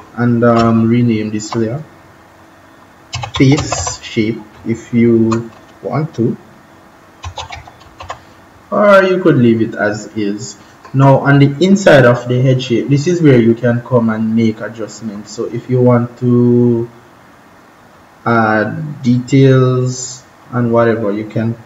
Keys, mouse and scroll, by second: 0.5 BackSpace, 2.9-4.2 typing, 6.9-8.4 typing, 10.5 click.